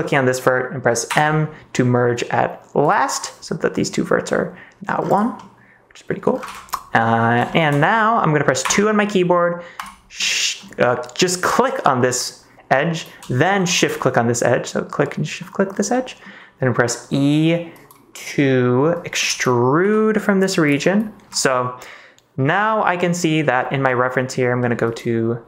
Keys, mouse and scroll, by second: 1.0 m, 4.2 middle click, 5.3 middle click, 6.4 ctrl+s, 6.9 middle click, 7.4 shift+middle click, 7.9 click, 8.6 2, 9.8 click, 10.1 middle click, 14.0 middle click, 15.3 middle click, 15.9 middle click, 19.8 e, 20.6 click, 21.4 middle click, 22.3 click, 23.2 click, 23.8 click, 24.6 click.